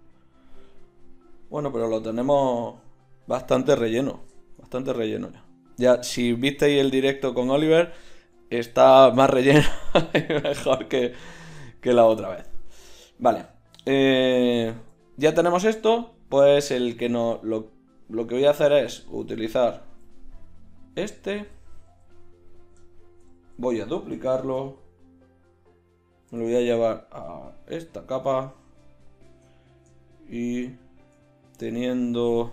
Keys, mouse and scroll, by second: 7.2-8.9 right drag, 18.4-18.8 drag, 19.0 z, 20.8-22.6 drag, 21.4 z, 21.8 z, 23.4 z, 23.5-24.8 drag, 24.8 shift+d, 26.3 m, 28.6-32.2 drag.